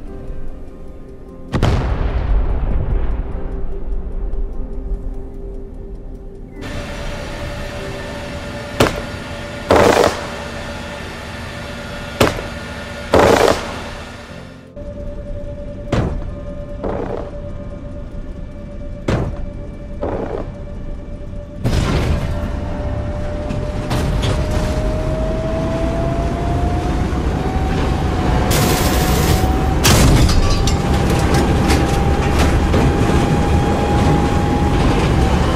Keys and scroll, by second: 21.0-22.0 typing, 27.5 e, 30.4 a, 32.2 a, 33.6 a, 34.5 e.